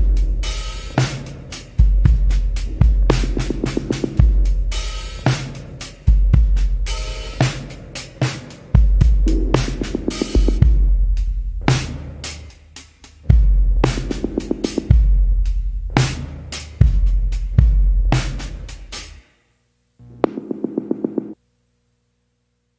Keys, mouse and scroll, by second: 2.8 scroll down 1, 8.3 scroll up 1, 17.4 scroll down 1, 21.3 scroll down 1, 21.9 scroll up 1.